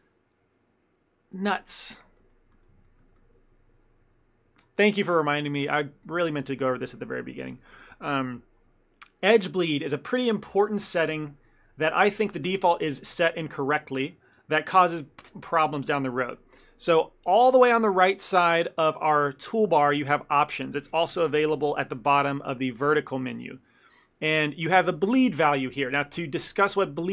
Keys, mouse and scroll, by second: 2.2 ctrl+middle click, 2.6 shift+middle click, 2.9 ctrl+middle click, 6.1 shift+middle click, 15.8 middle click, 20.9-21.7 scroll down 1, 22.5 click, 22.9 scroll down 1, 26.4 ctrl+middle click.